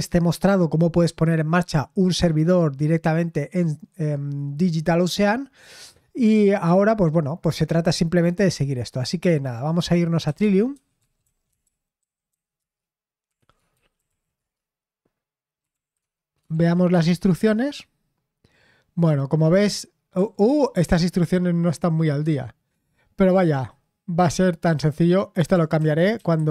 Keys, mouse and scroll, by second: 10.0-17.3 typing, 20.4 typing, 25.7-26.5 typing.